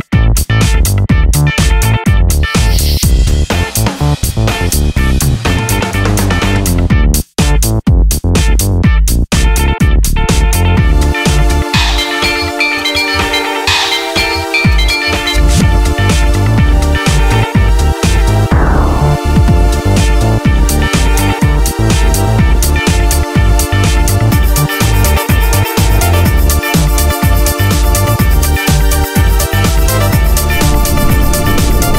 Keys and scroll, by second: 7.9 super+z, 10.7 2, 10.9 Return, 15.5 super+c, 15.7 super+v, 24.2 3, 24.3 Return, 27.3 2, 27.4 Return.